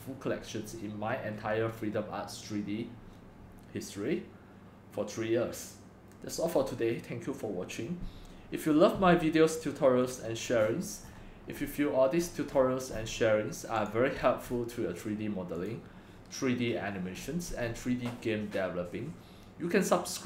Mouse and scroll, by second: 10.2 click, 10.7-12.2 scroll down 19, 12.2-13.0 scroll down 6, 13.0-13.9 scroll up 6, 13.9-14.2 drag, 14.2-15.7 middle drag, 14.2-15.6 scroll down 5, 15.6 scroll down 1, 15.7-17.2 drag, 17.2-20.2 scroll up 8, 17.2-20.2 middle drag.